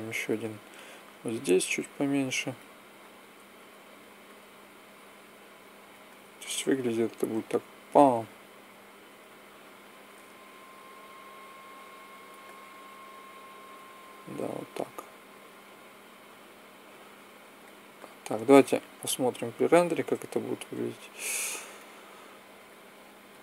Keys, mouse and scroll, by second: 3.1 s, 3.8 click, 4.6 click, 6.3 click, 6.5-8.4 drag, 10.5-14.5 drag, 14.5 middle click, 14.7-16.3 drag, 16.3 middle click, 18.9-22.3 drag.